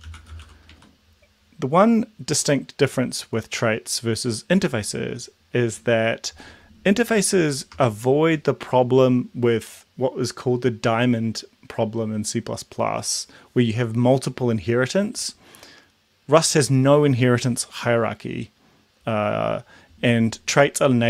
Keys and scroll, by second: 0.0-1.3 typing, 7.8 BackSpace.